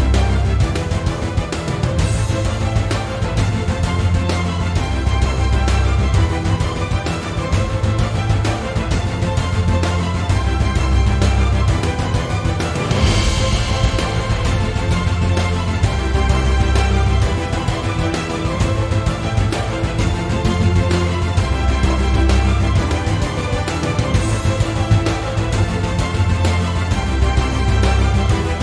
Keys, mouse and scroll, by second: 0.1 click, 0.2 g, 1.0 click, 1.2 g, 2.0 click, 2.5 click, 2.9 shift+click, 3.1-3.6 right drag, 3.6 click, 3.7 g, 4.3 click, 4.5-5.5 shift+middle drag, 5.5 click, 5.7 g, 6.5 shift+click, 6.6-7.5 right drag, 7.5 click, 8.4 ctrl+z, 9.4 click, 9.5 g, 10.1 click, 10.3-10.9 shift+middle drag, 10.9 shift+click, 11.1-12.4 right drag, 12.4 drag, 12.5 g, 13.1 click, 13.2 g, 14.4-14.7 shift+middle drag, 14.7 click, 15.0 g, 15.8 click, 15.9 g, 16.5 click, 17.3 click, 17.4 g, 18.3 drag, 18.3 g, 19.3 shift+click, 19.4-20.5 shift+right drag, 20.5 click, 20.6 g, 21.1 click, 21.2-21.7 shift+scroll up 1, 21.7 shift+middle click, 21.7 click, 21.9 x, 22.3 Escape, 22.5 click, 22.7 x, 23.6 scroll up 1, 24.1-24.7 shift+middle drag, 24.7 click, 24.8 g, 25.4 click, 25.5 g, 26.2 click, 26.3 g, 27.0 shift+click, 27.2 right click, 27.8 click, 27.9 g, 28.5 click.